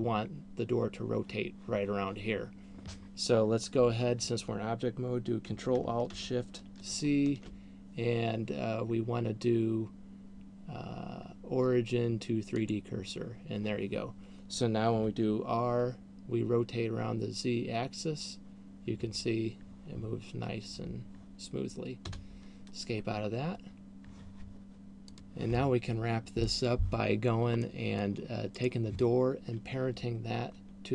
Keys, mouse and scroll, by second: 7.2 ctrl+alt+shift+c, 15.5 r, 23.5-25.5 scroll down 3, 28.2 middle click, 29.2 right click.